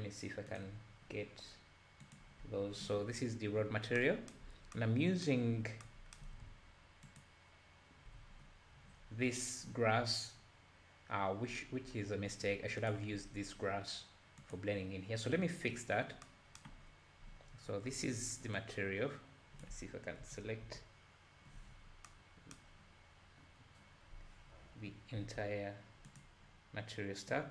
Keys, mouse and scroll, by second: 0.5-1.0 drag, 1.0-2.1 scroll down 5, 2.1 click, 2.4-3.0 scroll up 5, 4.5 scroll up 4, 7.2 ctrl+shift+click, 9.0-9.8 scroll down 2, 9.4-10.2 scroll up 2, 12.8 click, 14.4 click, 16.9 scroll up 2, 17.7-18.6 scroll down 8, 18.6-20.2 drag, 20.2 l, 20.6 l, 21.7-22.1 scroll down 1, 25.2 l, 26.1 click, 27.3 drag.